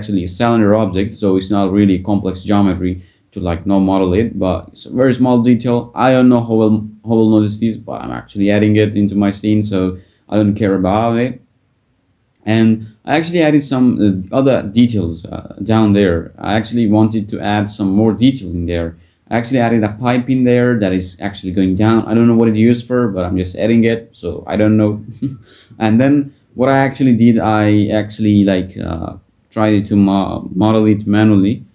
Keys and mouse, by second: 2.2 s, 3.7 click, 8.2 r, 8.3 r, 9.2 click, 9.8 s, 10.6 click, 15.3 f, 15.8 g, 18.4 click, 22.3 click, 24.7 f, 25.2 g, 28.7 s, 29.6 click, 30.2 g.